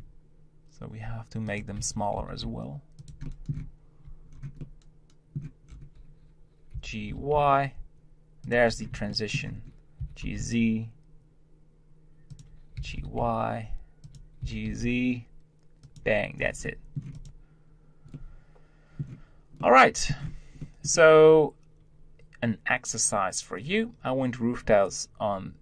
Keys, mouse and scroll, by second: 1.8 Tab, 2.1 g, 3.2 middle click, 3.5 z, 4.6-5.8 middle drag, 5.8-8.1 scroll down 1, 9.1 shift+middle click, 9.5-10.0 scroll up 1, 10.0 g, 12.8 g, 16.5 scroll down 1, 16.7-17.0 middle drag, 17.0 scroll up 1, 17.1 click, 18.1-23.2 middle drag, 23.2-25.6 scroll up 2.